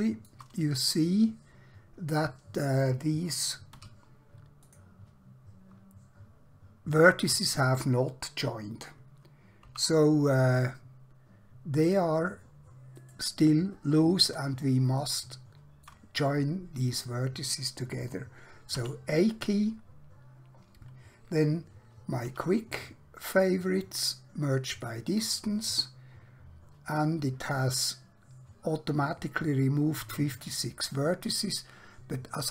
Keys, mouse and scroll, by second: 0.8 scroll up 1, 1.4-1.7 scroll down 1, 3.9 1, 4.6 click, 9.7 g, 13.0 right click, 14.1-14.9 scroll down 1, 15.1 middle click, 18.7 a, 22.3 q, 24.7 click.